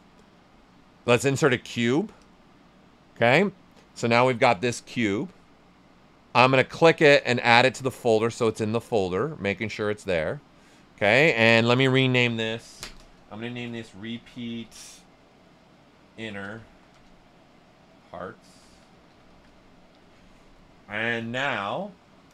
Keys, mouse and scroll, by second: 2.2 click, 6.5-9.5 drag, 9.5-11.1 right drag, 11.8 click, 13.3-19.8 typing.